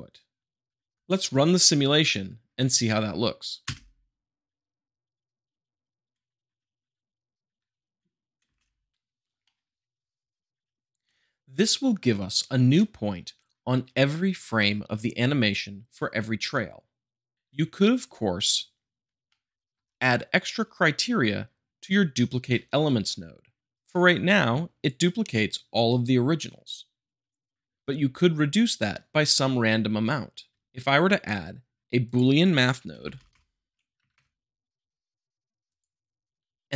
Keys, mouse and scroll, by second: 1.8-2.8 middle drag, 3.6 space, 8.4 space, 9.4-10.8 middle drag, 18.7-20.3 middle drag, 23.7-24.7 drag, 32.0 click, 32.9 b, 33.0 o, 33.3 l, 33.9 Down, 34.1 Return, 35.7-36.6 drag.